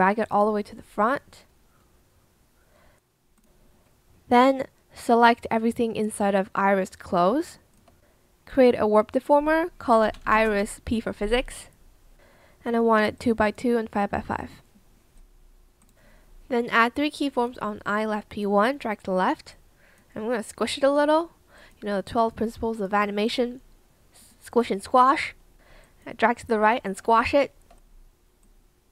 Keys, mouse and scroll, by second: 7.8 shift+click, 9.7-11.0 typing, 25.8 shift+click, 26.4 shift+click, 27.1 shift+click.